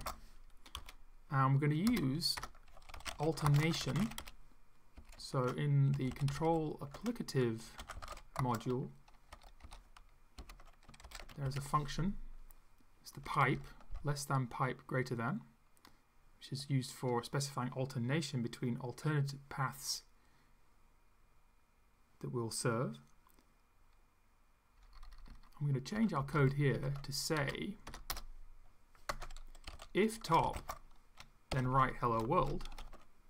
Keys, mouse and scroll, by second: 0.0-0.4 typing, 0.8 Up, 1.9 Return, 2.4-9.3 typing, 10.4 shift+,, 11.1 shift+\, 11.4 shift+., 13.2 Left, 13.5 Right, 24.8 Down, 26.0 Down, 26.2 ctrl+Left, 26.7 ctrl+Right, 27.9 BackSpace, 28.1 Return, 29.1 Tab, 29.4-31.5 typing, 32.6 End, 32.7 0.